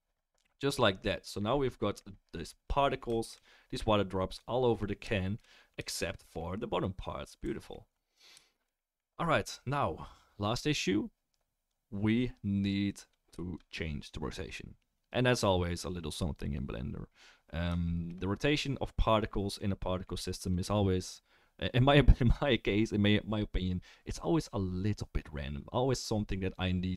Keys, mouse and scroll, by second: 7.9 click, 7.9 right click, 8.0-26.9 shift+middle drag, 13.5-26.9 drag, 13.5-26.9 right drag.